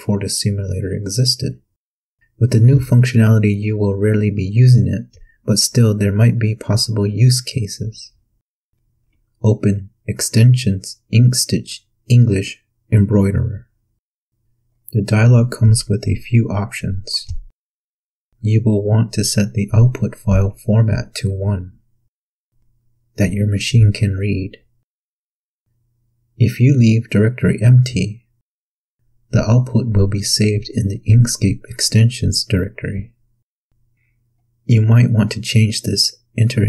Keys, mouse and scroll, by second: 9.3 click, 15.3 click, 23.7 click, 25.1 click, 27.3 click, 31.0 click.